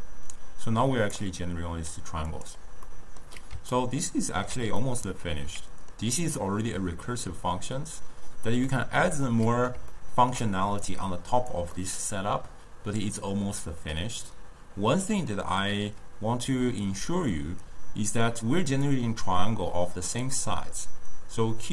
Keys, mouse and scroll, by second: 2.9-7.9 middle drag, 8.7-10.0 middle drag, 10.0-10.9 ctrl+scroll up 1, 10.9 click, 11.8-14.8 middle drag, 18.7 d, 18.9-20.3 drag, 20.3-21.7 d.